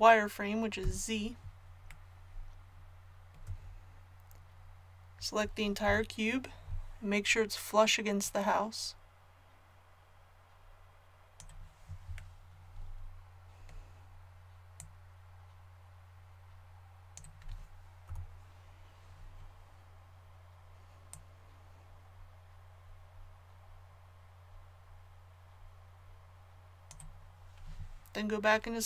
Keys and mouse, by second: 0.8 z, 5.8 l, 8.2-11.3 drag, 14.7-18.0 drag, 18.0 KP_7, 21.1-28.8 drag.